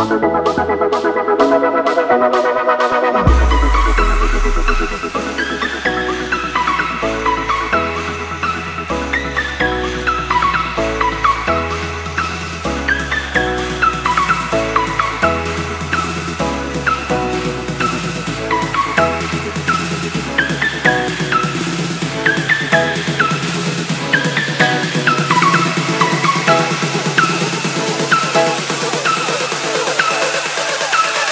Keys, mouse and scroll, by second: 0.8 click, 1.1 scroll down 1, 1.5 scroll up 1, 2.9 scroll down 1, 4.2 click, 6.2 Return, 7.5 right click, 9.5 click, 11.1 t, 11.6 click, 15.7 Return, 18.3 click, 24.9 Delete, 26.7 click, 30.2 Return, 30.6 click.